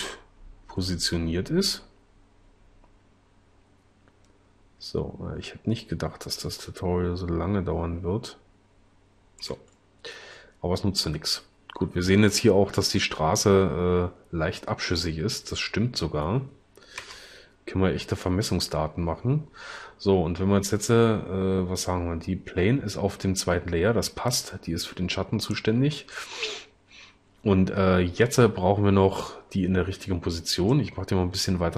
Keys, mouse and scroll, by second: 17.2 0.